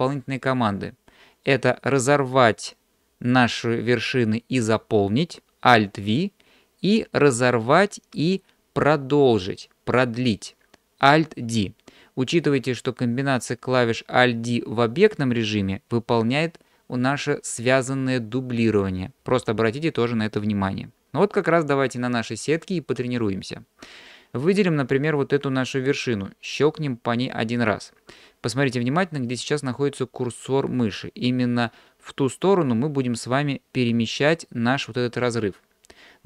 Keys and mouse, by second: 26.5 click.